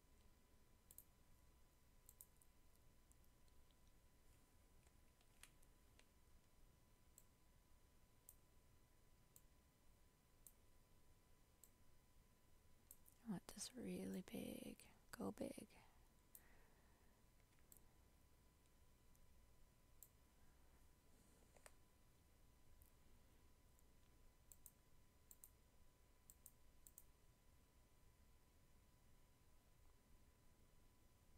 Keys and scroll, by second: 5.3 ctrl+t.